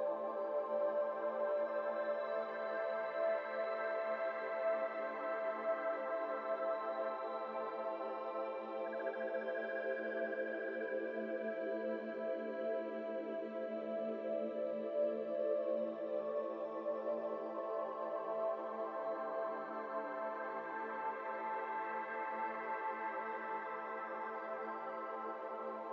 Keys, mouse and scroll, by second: 0.2-3.3 middle drag, 2.0 KP_7, 2.6 alt+z, 2.8-3.2 scroll up 2, 3.3 1, 3.6 shift+click, 4.3 alt+z, 4.3 alt+z, 4.4 scroll down 1, 4.5-6.6 middle drag, 6.6-9.9 drag, 12.4-12.7 scroll down 1, 12.7-15.8 middle drag, 15.8-16.9 drag, 16.9 scroll down 2, 17.1 middle click, 17.3-18.4 scroll up 2, 18.4-20.1 drag, 20.8 Tab, 20.9 scroll down 3, 21.0-21.4 middle drag, 21.4 click, 21.6 middle click, 21.8 scroll up 3, 22.1 click, 23.1-24.8 drag, 24.8-25.2 middle drag, 25.2 scroll down 3, 25.4-25.9 middle drag.